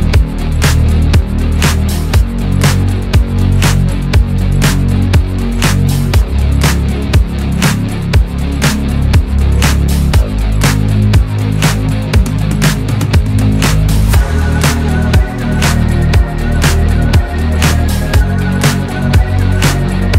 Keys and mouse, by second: 5.4-17.1 drag, 18.0 shift+click.